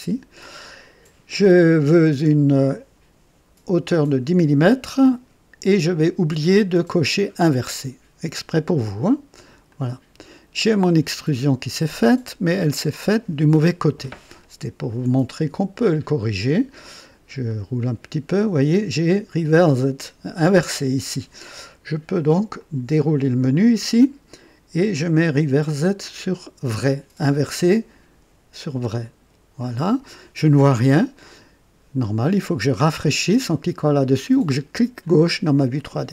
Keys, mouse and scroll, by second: 9.6 click, 10.9-12.7 drag, 15.3 click, 17.4 click, 22.5 click, 23.4 click, 29.0 click, 35.0 click.